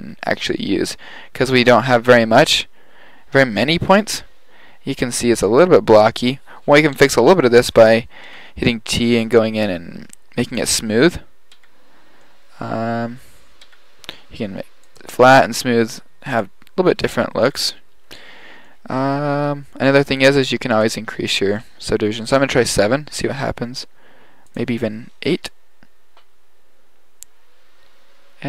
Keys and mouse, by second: 1.6-3.2 middle drag, 7.0 n, 7.7 n, 8.3 t, 10.5 click, 11.6 t, 12.3 middle click, 13.6 t, 14.9-16.5 drag, 17.5 t, 18.7 middle click, 24.6-26.5 drag.